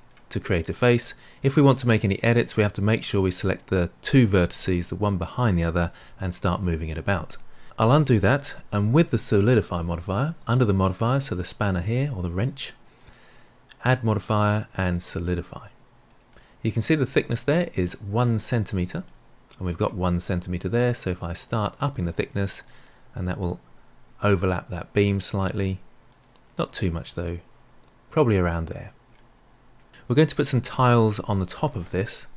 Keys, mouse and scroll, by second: 2.2 drag, 5.9 g, 7.6 ctrl+z, 10.6 click, 12.9-16.1 drag, 19.0-21.4 middle drag, 21.4-24.4 drag, 24.4-26.0 middle drag, 26.0-29.1 drag, 29.1-32.1 middle drag.